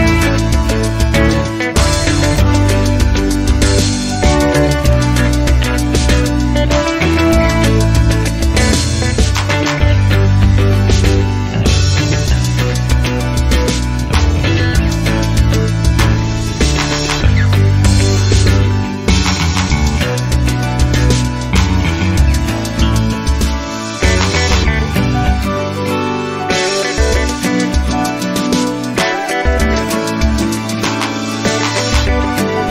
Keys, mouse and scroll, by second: 0.1-0.4 scroll down 1, 0.6-0.9 scroll up 1, 3.8 click, 5.4 ctrl+click, 8.8 click, 10.5 click, 11.6 9, 12.3 ., 12.6 9, 15.0 click, 16.0 click, 21.3 0, 22.0 scroll down 2, 22.8 scroll up 2, 24.2 click, 25.0 ctrl+click, 25.7 ctrl+click, 26.8 click, 28.3 click, 30.4 click, 31.8 click.